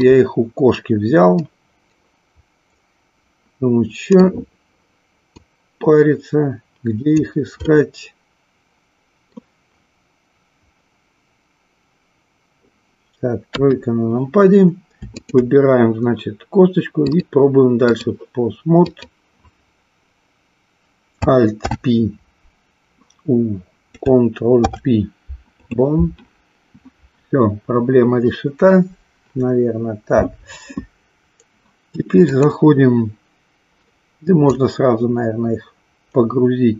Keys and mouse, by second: 1.4-4.4 middle drag, 5.3-7.2 drag, 7.8-9.4 middle drag, 13.4 KP_3, 15.2 shift+click, 17.1-18.2 drag, 18.8-20.2 drag, 21.5 alt+p, 24.4 ctrl+p, 32.3-33.7 drag, 34.5-36.7 drag.